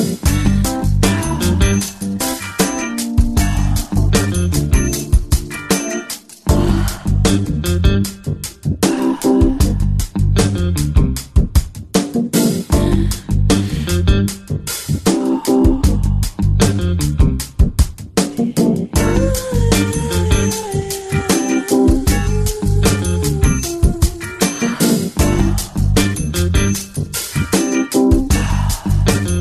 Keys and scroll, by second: 15.2 space, 18.5 ctrl+space, 27.5 ctrl+space.